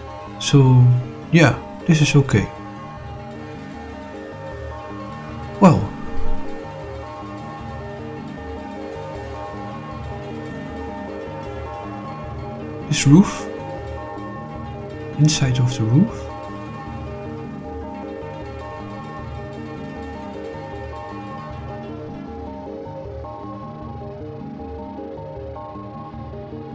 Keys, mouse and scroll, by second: 4.6-9.3 middle drag, 9.6-10.0 scroll down 2, 10.3-11.1 middle drag, 11.8 click, 13.1 click, 13.8 click, 15.0 click, 15.7 middle click, 17.0 shift+click, 18.8 click, 19.3 click, 20.8 scroll up 4, 21.4-21.8 scroll down 2, 21.8-23.0 shift+middle drag, 24.3-25.8 middle drag.